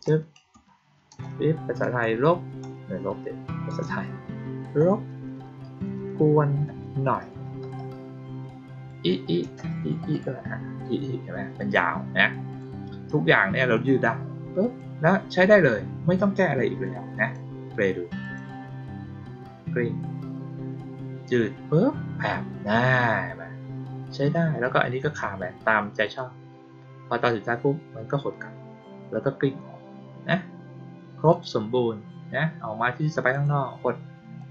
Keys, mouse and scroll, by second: 11.5 click, 12.4 click, 13.7-14.7 drag, 16.8 click, 18.1 click, 26.0 click, 31.2 click, 33.2 click, 34.3-34.5 drag.